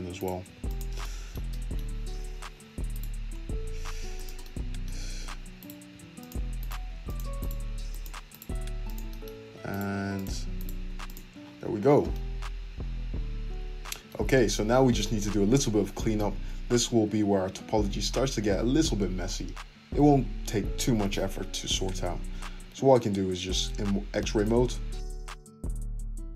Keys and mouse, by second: 0.1 click, 0.2-2.9 middle drag, 0.4 f, 2.9 click, 3.8 f, 5.6 click, 5.9 f, 6.6 click, 7.4 click, 7.4 f, 7.6 f, 8.3 click, 8.5 f, 9.7 click, 9.8 f, 10.5 click, 10.8 f, 11.4 Tab, 14.4-16.4 middle drag, 14.6 `, 16.4 Tab, 22.2 alt+z, 25.2-26.3 drag.